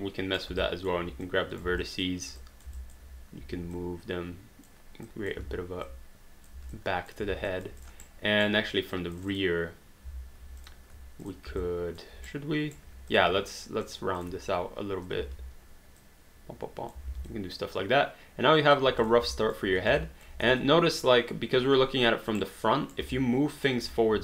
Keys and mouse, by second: 0.6 alt+click, 1.8 alt+click, 2.8 alt+click, 3.4 w, 3.7 click, 5.1 click, 5.9 click, 6.7 alt+click, 7.5 alt+d, 7.5 alt+click, 8.1 right click, 8.9 click, 10.6 click, 11.2 shift+click, 11.7 alt+click, 12.2 right click, 12.9 q, 13.1 click, 13.5 shift+click, 16.0 click, 17.3 alt+d, 17.4 alt+click, 19.0 click, 19.4 alt+click, 20.0 alt+click, 20.5 space, 22.4 right click, 23.7 alt+click.